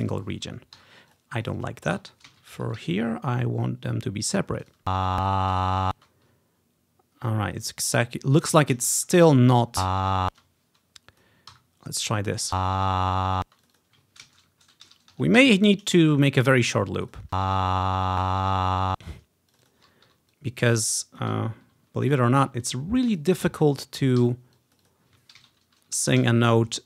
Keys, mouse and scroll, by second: 0.0 click, 0.2-1.2 drag, 0.9 Delete, 1.3 click, 1.6 click, 1.7-2.9 drag, 2.4 ctrl+c, 2.6 Right, 2.9 ctrl+v, 3.2 click, 3.8-4.8 ctrl+scroll up 1, 4.7 click, 4.9 space, 5.7 ctrl+click, 6.0 space, 6.7 ctrl+scroll down 1, 7.1 ctrl+scroll up 1, 7.5 ctrl+scroll down 1, 7.9-10.5 drag, 9.1 Delete, 9.8 space, 10.5 right click, 10.5 l, 10.5 space, 11.3-13.0 drag, 11.6 Delete, 12.6 space, 13.7-15.4 drag, 13.7 space, 14.3 ctrl+c, 14.6 0, 15.2 Right, 15.6 ctrl+v, 16.2-18.6 drag, 17.4 space, 19.1 space, 19.6-22.8 drag, 20.2 Delete, 23.2 click, 24.2 click, 24.9 click, 25.0-26.7 ctrl+drag, 25.5 ctrl+c, 26.0 Right, 26.3 ctrl+v.